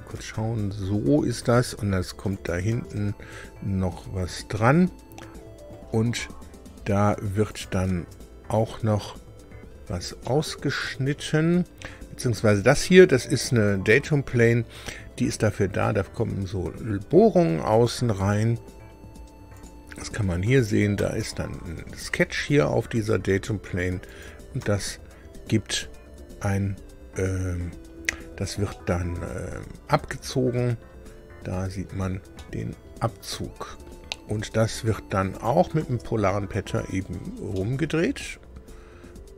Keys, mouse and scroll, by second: 0.1 space, 2.2 click, 2.7 space, 4.5 middle click, 5.3 click, 7.4 click, 7.8 space, 9.4-9.7 scroll down 2, 10.2-12.4 shift+middle drag, 12.7 middle click, 19.5 click, 20.4 click, 21.0 space, 24.0 click, 24.6 space, 28.7-30.7 middle drag, 31.7-32.1 scroll up 2, 32.3-34.0 middle drag, 35.3 click, 35.8 space, 37.0 scroll down 2, 37.5 shift+middle click.